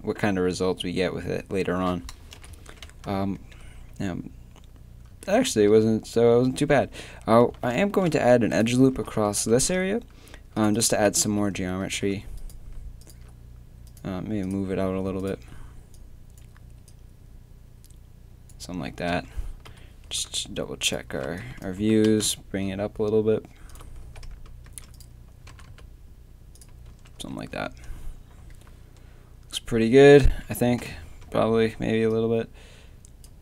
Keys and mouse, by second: 2.4 KP_7, 2.6 Tab, 3.8 a, 4.2 a, 5.7 z, 6.4 a, 6.8 a, 7.9 ctrl+r, 8.9 z, 9.5 ctrl+r, 11.1 z, 18.5 click, 19.1-21.8 typing, 24.0 z, 24.3 Tab, 24.7 Tab, 24.9 right click, 25.5 g, 26.9 Tab, 27.2 z, 27.5 z, 30.8 KP_7, 31.0 Tab.